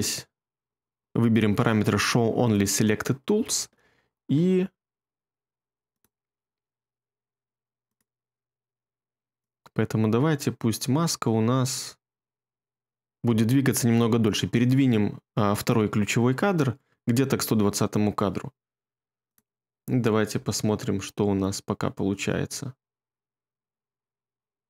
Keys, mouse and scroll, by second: 20.3 space.